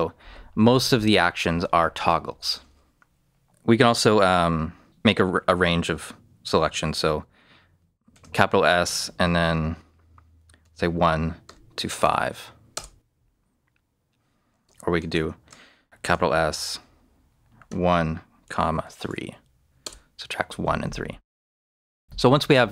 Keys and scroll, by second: 8.1 shift+s, 10.6 shift+1, 11.1 1, 11.4 -, 12.0 5, 12.7 Return, 14.9 shift+Return, 16.0 shift+s, 17.6 shift+1, 18.8 3, 19.8 Return.